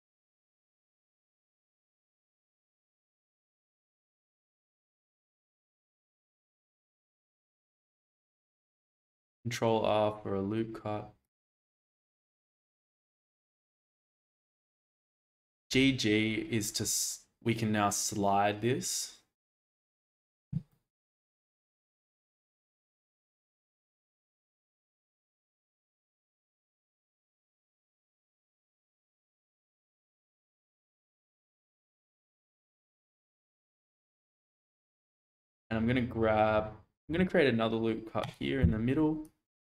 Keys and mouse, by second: 5.7-6.8 shift+middle drag, 7.4 ctrl+r, 11.2 click, 11.9 middle click, 13.6 click, 15.3 g, 15.6 g, 20.0 click, 20.7 shift+middle click, 21.8 shift+middle click, 26.4 shift+middle click, 28.0-32.2 middle drag, 34.5 shift+middle click, 35.4 click, 37.0 ctrl+r, 38.6 Escape, 39.2 click.